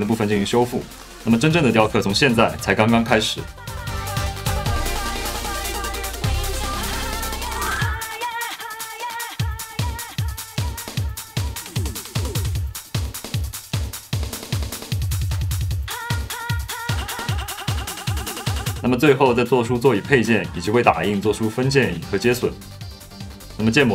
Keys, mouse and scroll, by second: 1.8 middle click, 2.4 middle click, 2.7 middle click, 2.8 middle click, 2.9 shift+s, 3.1 f, 3.7 shift+s, 3.7 f, 4.5 click, 4.9 click, 5.0 click, 5.2 click, 6.1 c, 7.0 click, 7.4 click, 7.8 click, 8.0 click, 8.2 click, 8.3 f, 8.4 f, 8.5 click, 8.7 middle click, 9.3 f, 9.5 f, 9.5 click, 9.6 middle click, 10.2 ctrl+z, 12.1 f, 13.5-16.6 typing, 13.7 ctrl+t, 14.1 click, 14.4 click, 14.6 middle click, 14.7 ctrl+t, 14.9 middle click, 15.3 middle click, 15.6 ctrl+t, 15.6 middle click, 16.4 middle click, 16.8 click, 16.9 middle click, 17.2 alt+q, 17.2 click, 17.6-19.3 typing, 18.9 ctrl+r, 19.2 click, 19.8 middle click, 20.0 middle click, 20.4 middle click, 20.4 g, 20.4 z, 21.1 ctrl+r, 21.1 middle click, 21.6 alt+z, 21.8-23.6 typing, 22.2 ctrl+alt+r, 23.8 middle click.